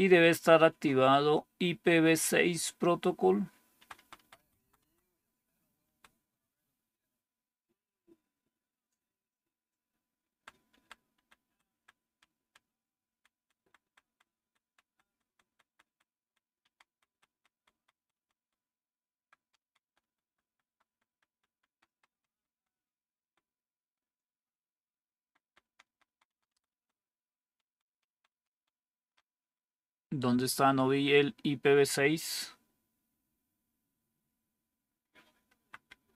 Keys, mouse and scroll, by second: 3.7 Down, 3.9 Down, 4.1 Down, 4.3 Down, 4.5 Down, 4.7 Down, 5.7 Down, 10.2 Down, 10.6 Down, 11.0 Down, 11.4 Down, 11.6 Down, 11.9 Down, 12.3 Down, 12.9 Down, 13.3 Down, 13.5 Down, 13.7 Down, 14.3 Down, 15.0-16.1 Down, 16.6 Down, 16.8 Down, 17.0-18.1 Down, 19.1 Down, 19.3 Down, 19.5 Down, 20.2 Down, 20.4 Down, 20.6-21.4 Down, 21.6 Down, 21.8 Down, 22.2 Down, 25.1 Down, 25.3 Down, 25.6 Down, 25.8-27.6 Down, 27.8 Down, 28.0 Down, 28.2 Down, 28.5 Down, 29.9-31.7 Up, 35.4 Up, 35.8 Up.